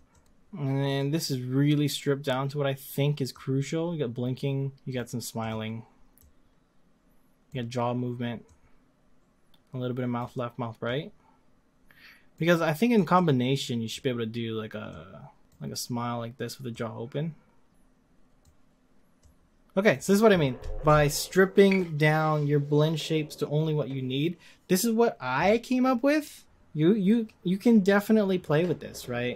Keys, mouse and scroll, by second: 3.5-4.9 drag, 5.4 click, 6.3-17.4 drag, 17.7-29.3 drag.